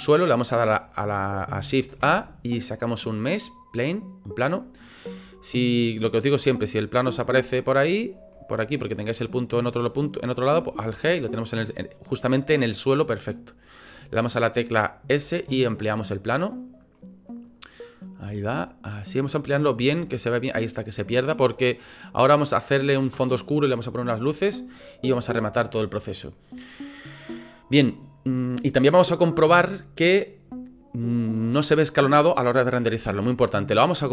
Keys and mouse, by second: 1.9 shift+a, 7.1 g, 8.3 drag, 10.8 alt+g, 12.6-13.3 drag, 15.1 s, 17.7 click, 18.2 s, 19.8 s, 20.5 click, 21.9 click, 25.3-26.0 shift+drag, 26.3 click.